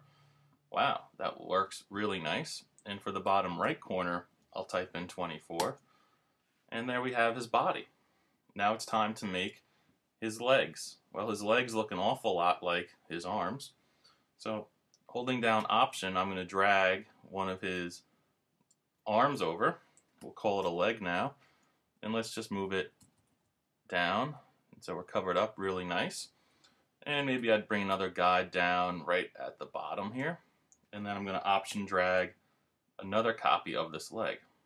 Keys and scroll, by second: 5.6 Return, 20.6 super+=, 21.8 Down, 22.4 Left, 23.0 Down, 24.1 Left.